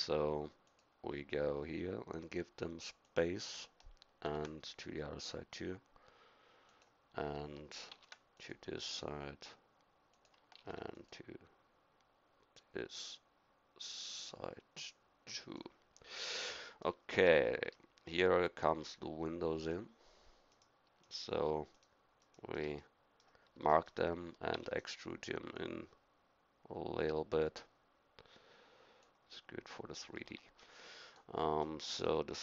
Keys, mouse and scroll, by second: 4.3 ctrl+r, 7.9 ctrl+r, 10.6 ctrl+r, 16.1 middle click, 22.8-24.5 middle drag, 24.5 e, 30.3 Tab, 31.6-32.4 middle drag.